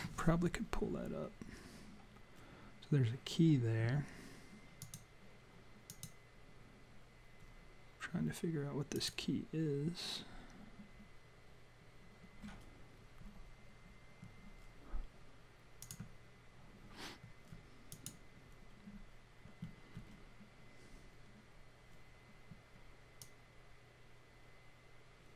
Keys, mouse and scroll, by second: 4.7 click, 5.8 click, 15.8 click, 17.9 click, 23.2 click.